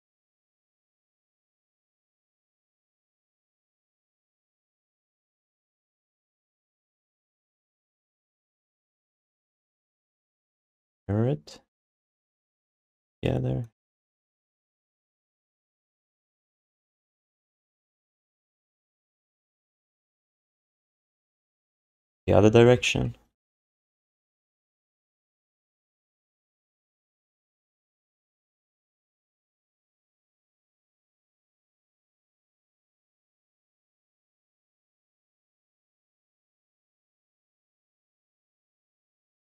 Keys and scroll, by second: 0.4 w, 0.7 v, 1.9 q, 2.4 alt+shift+d, 4.5 q, 5.0 w, 5.3 v, 6.1 q, 6.7 alt+shift+d, 7.5-8.9 typing, 9.6 ctrl+shift+d, 12.2 alt+shift+d, 12.7 q, 14.6 q, 17.5 alt+shift+d, 17.7 ctrl+s, 18.3-19.5 typing, 19.9 ctrl+shift+d, 22.1 Tab, 22.3 Tab, 25.5 alt+d, 25.7 q, 29.2 q, 32.8 alt+shift+d.